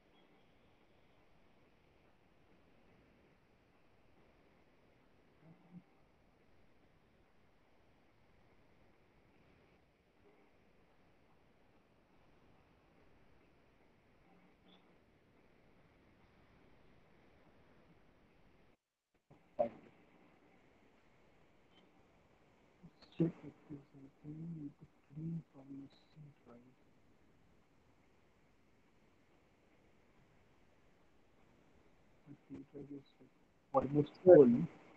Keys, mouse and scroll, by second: 14.0 right click, 15.0 click, 19.6 click, 20.5 click, 22.5 click, 24.1 click, 24.5 middle click, 26.0 click, 29.9 click, 30.0 click.